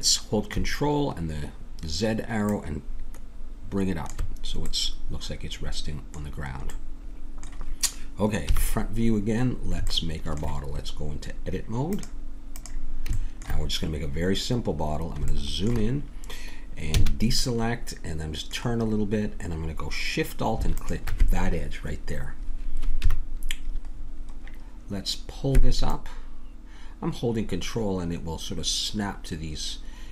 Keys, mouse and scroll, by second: 2.5-4.7 drag, 8.4 KP_1, 11.8-13.6 drag, 13.6 middle click, 16.9 a, 17.5-19.1 middle drag, 20.7-23.0 drag, 23.0 KP_1, 23.9-25.1 middle drag, 25.9-27.7 drag.